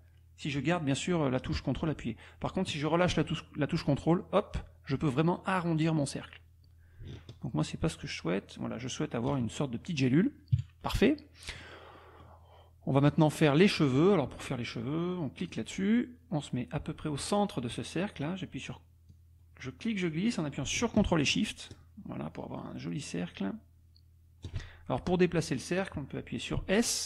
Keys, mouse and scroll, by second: 3.6-7.0 scroll up 1, 7.0-9.3 ctrl+scroll up 1, 9.3 ctrl+scroll up 1, 10.5 KP_Subtract, 11.2 click, 15.4 click, 19.1-20.3 drag, 20.3-21.0 scroll down 3, 26.6 s.